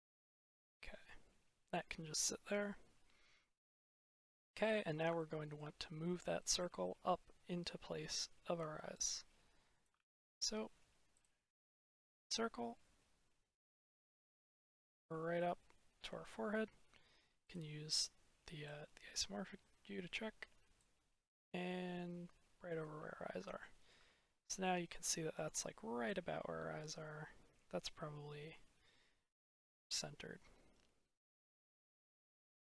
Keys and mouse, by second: 5.0-5.5 shift+middle drag, 6.3 middle click, 6.7-7.9 shift+middle drag, 8.8 click, 9.9 ctrl+z, 12.2 click, 15.4 middle click, 20.7 click, 23.3 shift+middle click, 25.0 shift+middle drag, 25.9 click, 32.0-32.3 shift+middle drag.